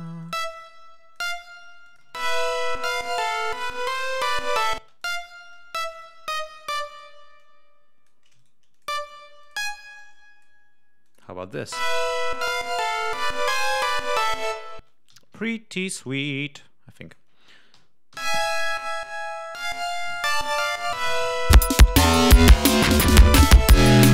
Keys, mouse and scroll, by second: 0.5 click, 1.7 click, 1.9 space, 4.9 click, 4.9 space, 5.4-7.1 drag, 7.3 click, 8.3 shift+right click, 8.6 shift+click, 9.3 click, 9.9 click, 10.9 click, 11.5 space, 14.7 space, 15.1 g, 15.4 ctrl+scroll down 2, 16.9 click, 18.1 l, 18.7 ctrl+scroll down 2, 21.5 click, 23.5 click.